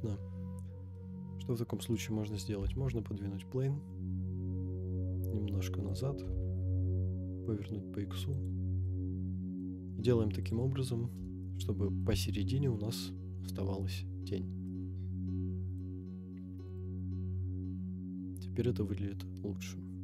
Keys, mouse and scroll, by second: 0.0-0.5 scroll down 5, 0.9-1.4 middle drag, 1.8 scroll down 1, 2.6 g, 2.7 y, 6.0 click, 6.2 r, 6.3 x, 8.4 click, 8.8-9.7 middle drag, 10.4 click, 10.8-11.1 scroll up 4, 11.4-12.0 shift+middle drag, 12.1-12.6 scroll up 3, 13.3-13.6 scroll down 4, 14.1-14.6 scroll down 2, 14.6-15.9 middle drag, 16.8 KP_0, 18.1-18.6 scroll down 4, 18.6-19.8 scroll up 2.